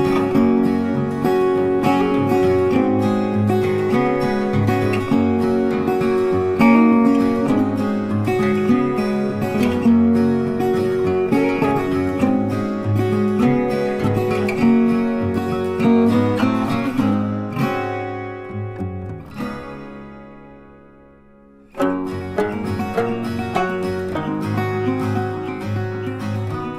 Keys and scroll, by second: 24.3 ctrl+t.